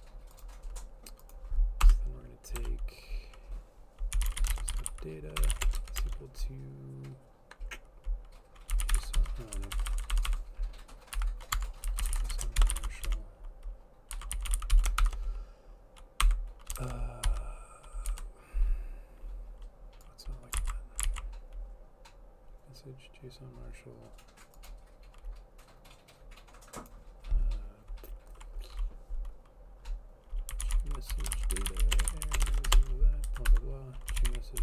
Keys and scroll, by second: 1.9 Return, 2.7 Return, 4.0-6.4 typing, 8.6-10.4 typing, 11.7 shift+Tab, 11.7-18.2 typing, 20.7 ctrl+x, 21.2 ctrl+s, 30.4-34.6 typing, 33.4 End, 33.6 Left.